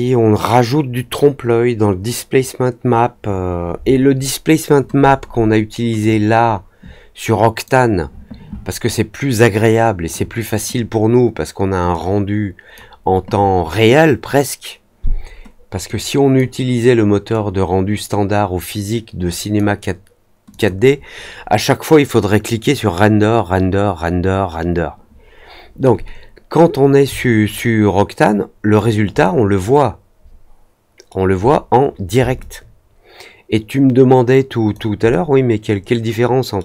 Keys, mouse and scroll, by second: 5.9-7.6 drag, 11.9-12.7 drag, 15.8-16.3 drag, 17.2-19.5 drag, 20.4 click, 27.4-28.7 alt+drag, 29.2-31.0 alt+middle drag, 32.3-34.7 alt+drag, 35.0-36.5 alt+middle drag.